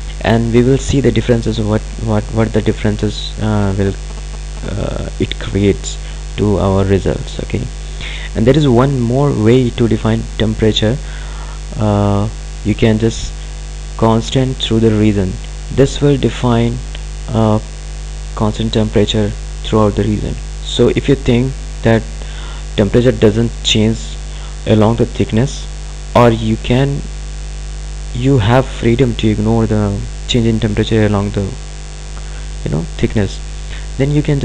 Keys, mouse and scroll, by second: 12.8 click.